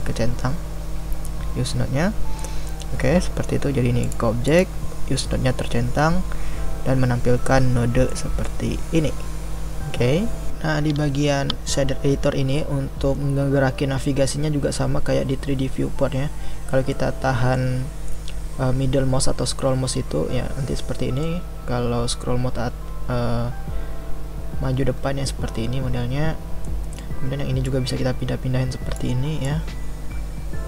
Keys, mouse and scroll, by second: 27.6-30.6 drag.